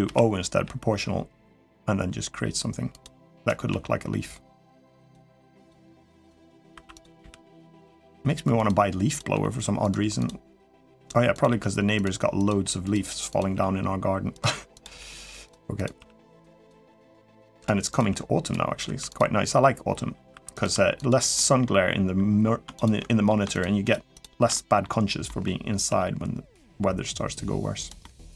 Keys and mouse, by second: 0.3 g, 3.5 g, 6.8 click, 6.8 1, 7.0 g, 8.9 click, 9.1 g, 10.4 g, 11.2-12.3 drag, 12.3 g, 13.3 g, 14.7 g, 15.7 g, 16.4 click, 16.8 g, 17.7 click, 17.9 g, 18.6 3, 18.9 click, 20.1 3, 20.3 click, 21.1 middle click, 22.5 click, 22.8 middle click, 23.9 shift+click, 24.3 middle click, 25.0 middle click, 25.6 g, 27.8 middle click.